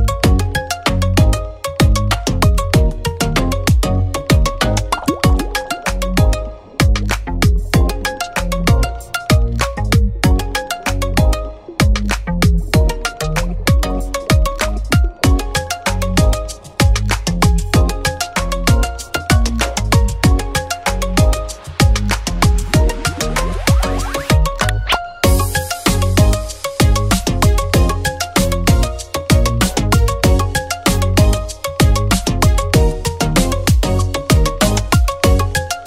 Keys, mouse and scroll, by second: 0.0-0.4 typing, 1.3 click, 2.2-3.7 typing, 5.1 typing, 5.3-8.2 drag, 8.2 p, 9.5-12.0 shift+drag, 9.5-10.4 typing, 20.3 typing, 20.5 click, 23.2-24.0 scroll up 1, 24.0-26.3 drag, 24.8 typing, 27.9 space, 28.4 click, 29.0-30.0 typing, 30.0 click, 30.4 scroll up 1, 31.3-34.2 drag, 34.2 scroll down 1, 35.6-35.8 scroll up 1, 35.6 typing.